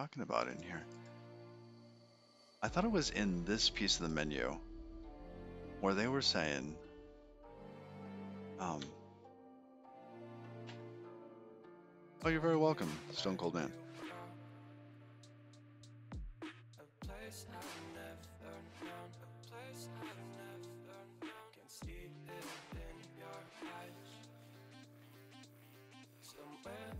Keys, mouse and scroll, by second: 0.3 click, 1.3 click, 1.8 click, 4.8 click, 7.2 middle click, 10.6 middle click, 11.0 middle click.